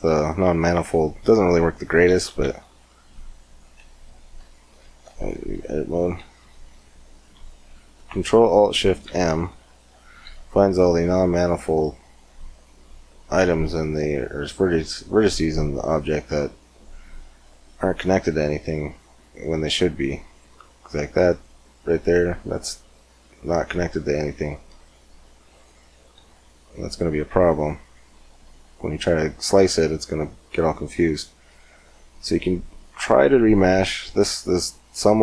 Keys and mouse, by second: 0.1 Tab, 2.2 ctrl+alt+m, 5.0 Tab, 6.2 a, 8.9 ctrl+alt+s, 14.2 z, 19.0-21.1 drag, 19.4 g, 22.4 click, 24.0 g, 25.8 z, 27.0 Tab, 31.4-34.8 drag.